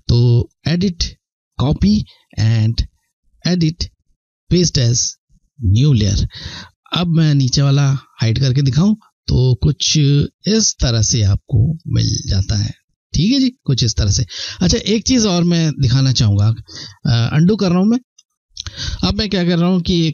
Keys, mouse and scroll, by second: 0.1 click, 4.1 click, 11.0 click, 11.4-11.8 ctrl+scroll up 1, 12.4 ctrl+scroll down 1, 16.0 ctrl+scroll down 1, 16.4 ctrl+z, 17.7 ctrl+z, 19.8 click.